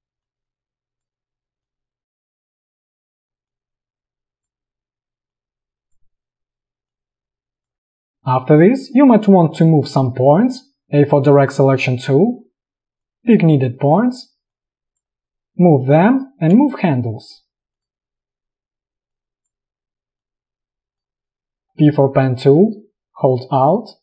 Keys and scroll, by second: 2.6 space, 10.9 a, 16.6 space, 21.6 p.